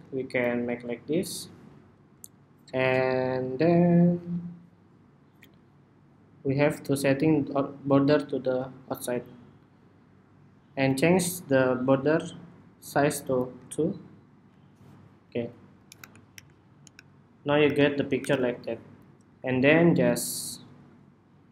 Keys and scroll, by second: 15.7 super+-, 16.1 super+-, 16.6 super+-, 17.4 super+=, 18.0 super+=.